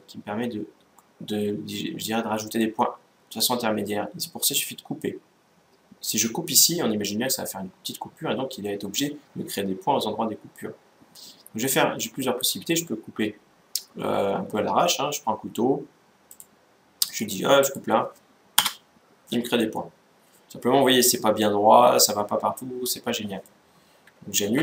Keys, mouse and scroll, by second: 2.3-4.0 drag, 16.0-17.7 drag, 19.3-21.0 middle drag, 24.2 ctrl+z.